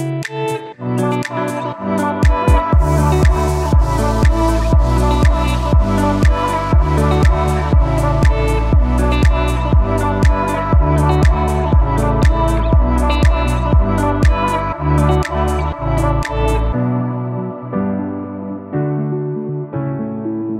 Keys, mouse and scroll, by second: 8.3-13.2 alt+drag, 13.2-15.0 alt+drag, 17.3 click, 17.4-19.4 alt+drag.